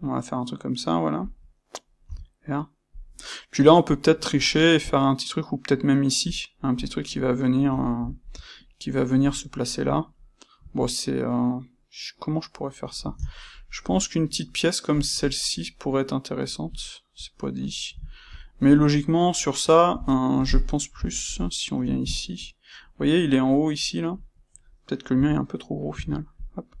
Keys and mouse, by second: 2.0 f, 2.9 click, 7.7-14.9 ctrl+middle drag, 14.9 click, 15.1-25.1 ctrl+middle drag, 21.2 KP_1, 25.1 c, 25.9 Escape, 26.3 click.